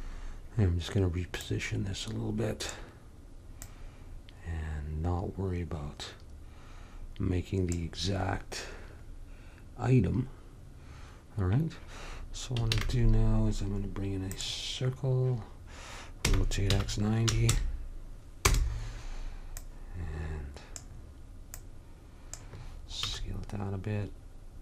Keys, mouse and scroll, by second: 1.5-3.3 drag, 3.7-5.6 drag, 8.4-12.7 middle drag, 12.8 shift+a, 16.4 r, 19.7 click, 23.1 s.